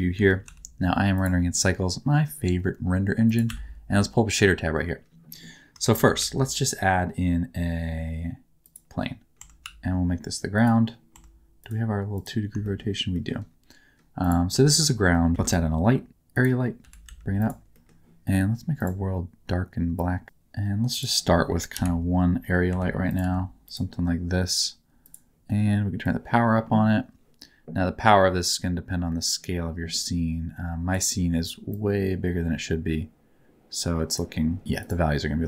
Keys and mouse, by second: 0.1 n, 0.4 t, 1.1 click, 3.2 click, 6.0 shift+c, 6.1 shift+a, 9.4 Tab, 9.6 s, 11.1 Tab, 12.6 middle click, 13.1 middle click, 14.2 click, 14.7 shift+middle click, 15.1 middle click, 15.3 shift+a, 16.8 g, 17.0 z, 17.4 click, 17.7 middle click, 19.9 click, 21.7 KP_1, 22.7 r, 23.0 click, 23.2 g, 23.6 click, 25.0 click, 26.0-28.4 drag, 29.3-30.9 drag, 31.8-34.1 drag, 34.8 click.